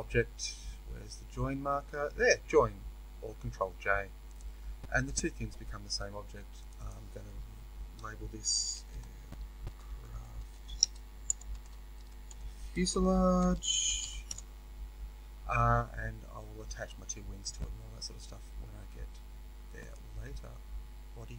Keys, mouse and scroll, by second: 4.3-6.6 drag, 6.7-19.8 drag, 14.3 Return, 21.0 scroll down 1.